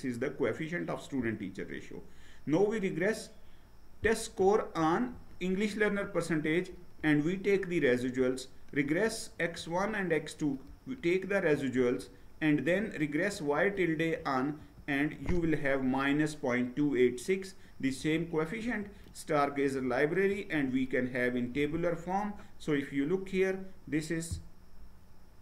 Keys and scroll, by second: 6.2 ctrl+Return, 7.3 ctrl+Return, 9.6 ctrl+Return, 11.6 ctrl+Return, 13.4 ctrl+Return, 14.7 ctrl+Return, 18.6 ctrl+Return, 20.2 ctrl+Return.